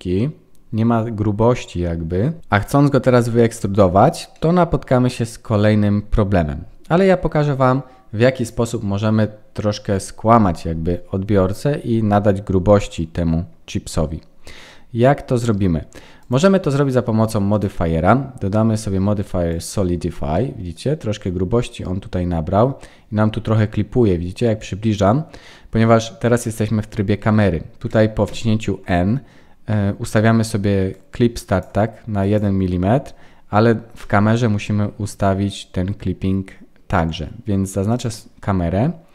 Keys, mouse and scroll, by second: 2.4 scroll up 1, 4.3 middle click, 16.2 click, 20.3 middle click, 21.0-21.5 scroll up 4, 21.5-22.5 scroll down 2, 22.5 scroll down 2, 22.9-23.6 scroll up 5, 23.6 scroll down 1, 24.1-24.6 scroll up 1, 24.6 scroll down 1, 28.2 n, 30.9 click, 34.0 n, 37.9 click.